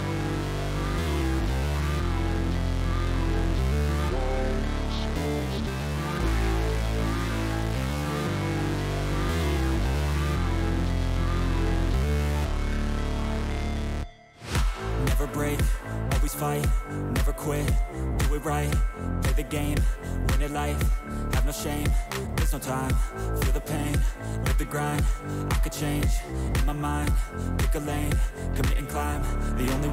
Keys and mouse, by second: 1.5 alt+click, 2.9 click, 4.5 click, 5.4 click, 6.7 shift+click, 7.3 click, 7.7 click, 8.8 click, 9.3 click, 9.8 click, 12.9 click, 14.3 click, 15.0 click, 17.5-18.9 drag, 19.9 click, 20.6 alt+click, 22.5-23.6 drag, 24.8 alt+click, 26.9-28.3 drag.